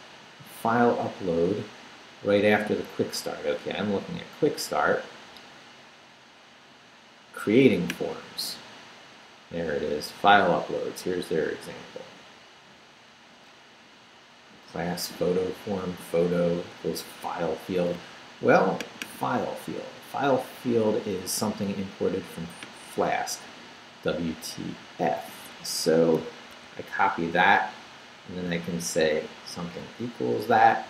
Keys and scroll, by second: 26.2 super+c.